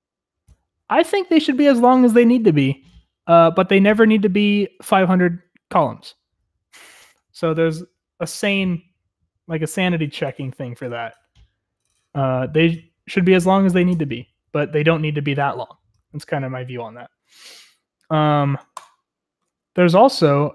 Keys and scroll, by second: 20.3-20.5 typing.